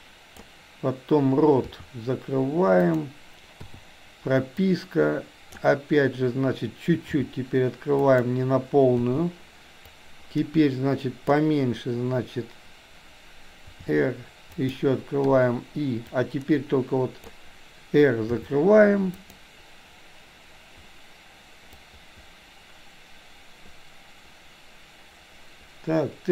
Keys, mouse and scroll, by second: 1.6 r, 3.6 i, 4.7 click, 7.2 r, 9.1 i, 10.0-11.5 drag, 13.7 r, 15.2 i, 16.2-17.3 drag, 18.3 r, 21.8-26.3 drag.